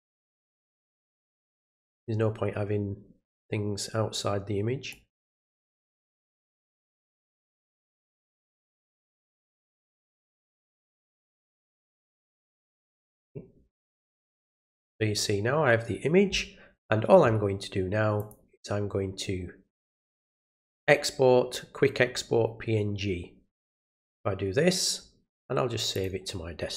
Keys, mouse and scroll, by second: 0.9-3.3 drag, 4.9-7.5 drag, 8.7-11.3 drag, 11.9 click, 12.0 click, 18.2 click, 23.5 click, 25.9 click.